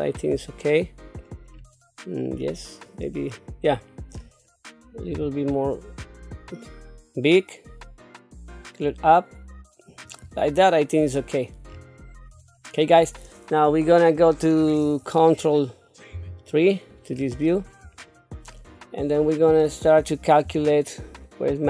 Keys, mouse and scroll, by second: 0.4 middle click, 1.5 scroll up 2, 2.4 middle click, 3.8 scroll down 1, 4.2-4.6 scroll up 1, 5.1 s, 11.7-12.3 scroll up 3, 12.3-14.8 scroll down 2, 16.1 ctrl+KP_3, 17.1 scroll up 2, 18.0 shift+middle click, 19.2 click, 20.4 g.